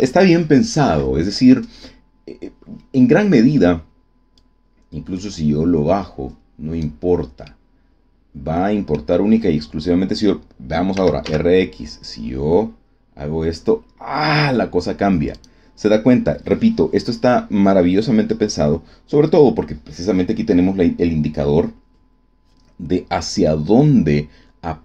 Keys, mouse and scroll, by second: 4.3-7.0 drag, 7.4-9.1 middle drag, 10.9 r, 11.2 x, 15.3 click.